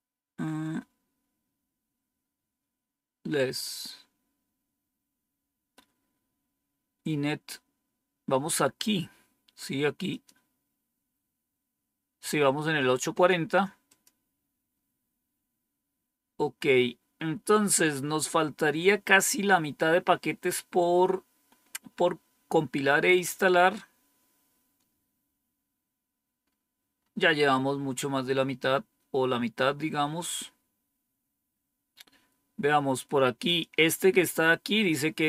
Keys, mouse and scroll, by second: 10.0 click, 10.7 click, 13.8 click, 17.3-17.8 scroll down 2, 17.8 scroll down 1, 20.7 scroll down 2, 21.4-23.4 scroll down 1, 23.4-25.2 scroll down 1, 25.2 scroll down 1, 25.5-26.3 scroll up 1, 26.3-27.4 scroll up 1, 27.4-28.2 scroll up 1, 28.2-29.0 scroll up 1, 29.0-29.7 scroll down 1, 29.7-32.1 scroll down 1, 32.1-33.3 scroll down 1, 33.3 click.